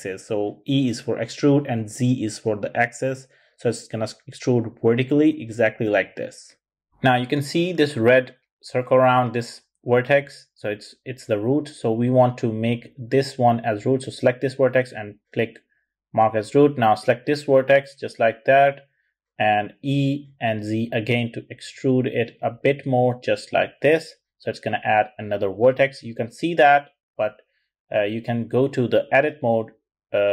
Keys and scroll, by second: 18.5 e, 19.2 z.